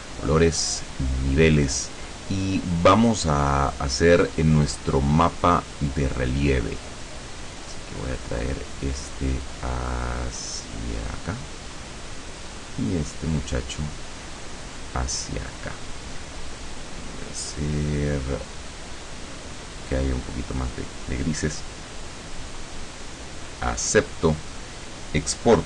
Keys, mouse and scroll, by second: 0.9 click, 2.8-3.7 drag, 5.3-6.2 drag, 7.6-11.4 drag, 12.5-15.7 drag, 17.1 click, 18.8-21.5 drag, 24.0 click.